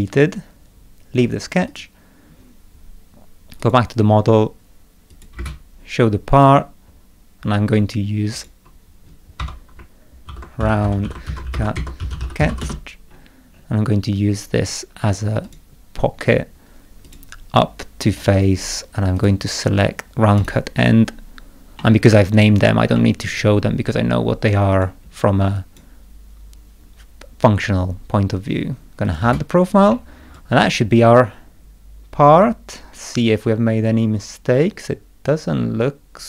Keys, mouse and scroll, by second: 1.7 click, 3.6 click, 5.1 click, 5.3 space, 6.3 click, 6.8 middle click, 8.3 click, 9.4 F2, 10.0-13.0 typing, 13.1 scroll up 2, 13.5 scroll down 2, 15.4 click, 17.0 click, 18.1 click, 19.1 click, 20.4 click, 21.8 middle click, 22.9 middle click, 24.7 click, 25.5 click, 29.0 click, 29.2 space, 29.9-36.2 middle drag, 30.3-36.2 drag.